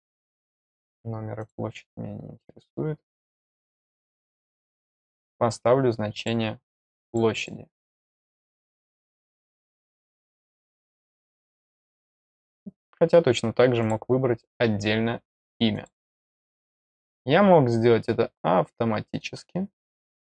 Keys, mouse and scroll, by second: 0.4 click, 1.3 click, 4.8 click, 6.1 click, 7.0 click, 7.3 click, 8.3 middle click, 10.7 click, 13.7 click, 15.7 click, 19.3 middle click.